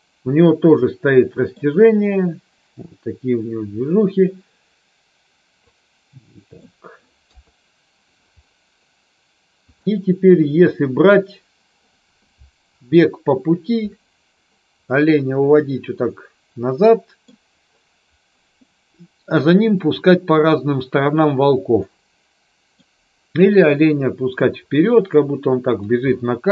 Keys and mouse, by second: 0.4-1.7 middle drag, 5.8-6.7 middle drag, 7.4 KP_3, 15.0-17.4 middle drag, 21.8-22.8 middle drag.